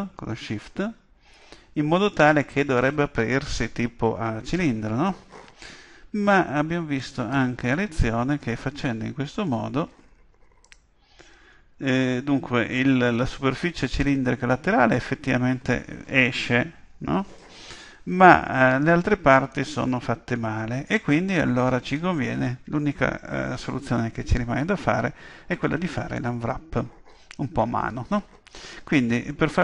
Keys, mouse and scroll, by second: 0.6-2.5 middle drag, 7.0-8.8 drag, 8.4 a, 8.7 a, 9.5 u, 19.5-21.5 middle drag, 29.5-29.6 middle drag.